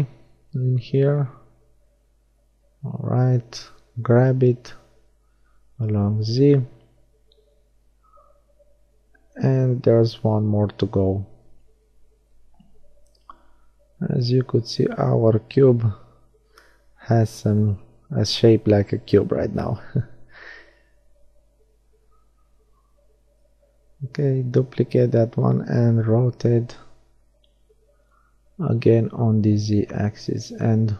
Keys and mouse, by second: 6.8-9.0 middle drag, 10.0-13.4 middle drag, 10.7 shift+d, 16.2 click, 18.0-20.3 middle drag, 20.5 middle click, 22.1 r, 27.8-29.5 middle drag, 29.5-30.9 drag.